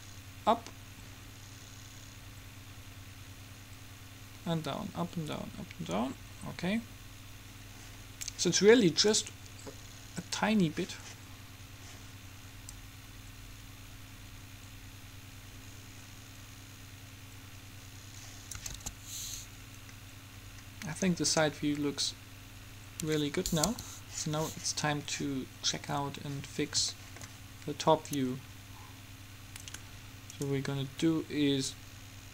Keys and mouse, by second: 9.3-10.9 middle drag, 12.9-14.5 drag, 18.8 alt+a, 23.1 Escape, 23.8 KP_7, 29.8 click, 30.5-31.6 middle drag, 31.6 click, 31.7 right click, 31.8 middle click, 32.2-32.3 drag.